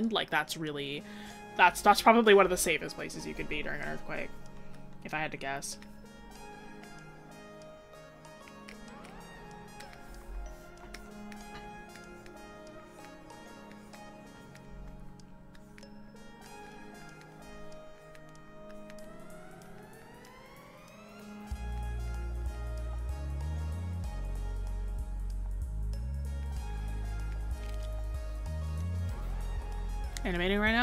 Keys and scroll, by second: 3.7 scroll up 1.